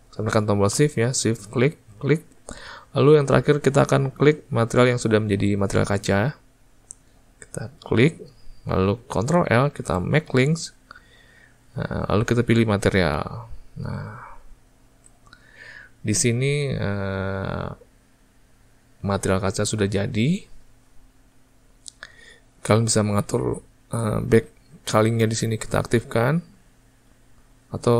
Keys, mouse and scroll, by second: 1.0 shift+click, 2.3 shift+click, 8.2 shift+click, 15.0 alt+a, 25.3 click, 26.6 click, 27.4 click.